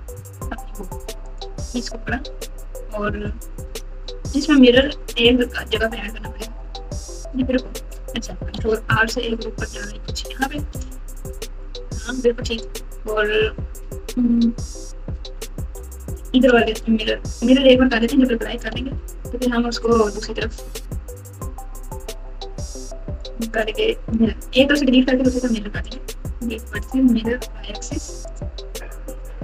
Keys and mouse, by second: 1.2 click, 1.7 Tab, 8.5 ctrl+r, 15.0 click, 16.6 alt+z, 17.5 click, 19.8-23.2 drag, 25.4 x, 26.7-28.3 drag, 29.0 click.